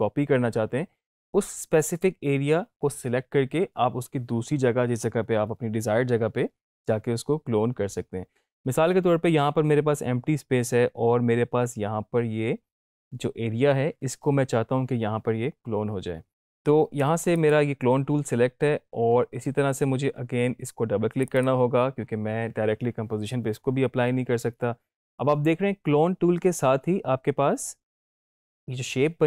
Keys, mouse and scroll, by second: 16.4 click, 17.3 click, 21.1 click.